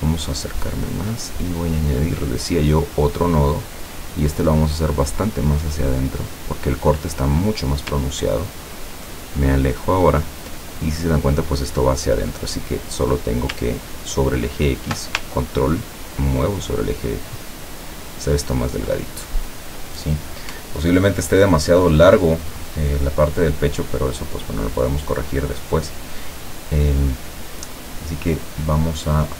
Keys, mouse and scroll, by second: 0.1-0.9 ctrl+scroll up 4, 2.0 click, 3.7-6.5 drag, 8.8-9.8 ctrl+scroll down 4, 12.7 click, 15.6-18.8 ctrl+drag, 19.3 ctrl+scroll up 2, 19.5 scroll down 1, 20.1 scroll up 1, 20.7-21.1 ctrl+scroll down 1.